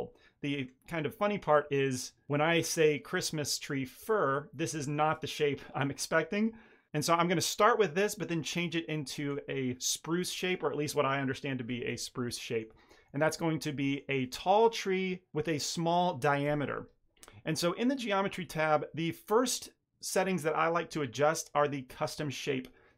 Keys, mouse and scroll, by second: 1.0-1.6 scroll down 4, 1.6 shift+middle click, 2.3 middle click, 2.5 ctrl+middle click, 3.3 shift+middle click, 3.9-4.6 ctrl+middle drag, 12.4 middle click, 12.7 shift+middle click, 13.1 ctrl+middle click, 13.8 shift+middle click.